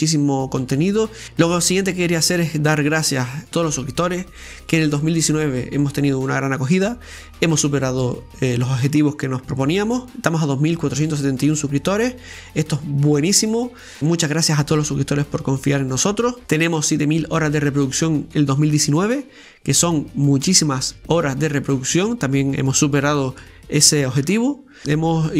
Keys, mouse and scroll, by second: 2.8-3.3 scroll up 2, 3.3-4.9 middle drag, 4.9 Tab, 5.2-6.3 middle drag, 6.3-10.4 drag, 10.4 Tab, 10.6 Tab, 11.0 Tab, 11.9 Tab, 12.9 click, 13.9 right click, 14.2 Tab, 14.7-15.9 middle drag, 15.9 right click, 16.6 shift+right click, 16.9-19.1 middle drag, 19.1 KP_7, 19.8 scroll down 2, 20.2-22.2 shift+middle drag, 22.2 e, 23.7-24.8 middle drag, 24.6-25.3 scroll up 4, 25.1 middle click, 25.2 middle click.